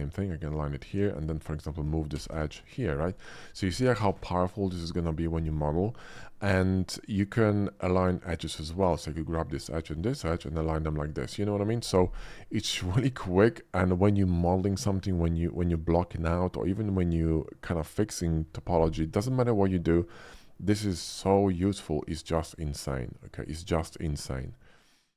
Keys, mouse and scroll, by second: 0.1 middle click, 0.8 Tab, 1.2 click, 2.1 g, 2.3 y, 3.0 click, 7.0-8.0 middle drag, 8.3 middle click, 8.5 middle click, 9.0 click, 9.9 shift+middle click, 10.3 alt+a, 11.0 alt+middle click, 21.4 shift+middle click, 22.3 shift+middle click, 24.6 middle click.